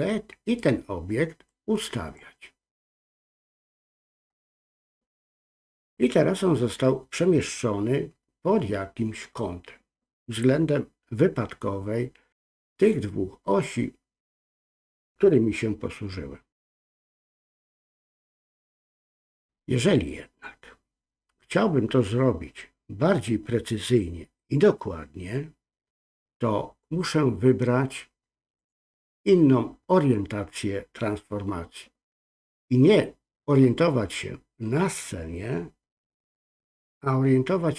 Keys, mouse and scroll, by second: 1.5-2.1 drag, 3.2 click, 3.4-4.2 drag, 28.6-37.7 drag.